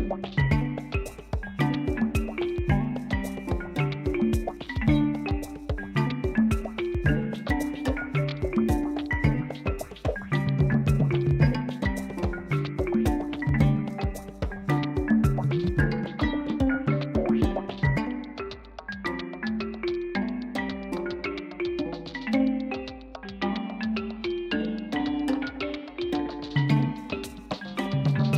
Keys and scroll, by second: 21.7 1, 22.7 g, 23.0 z.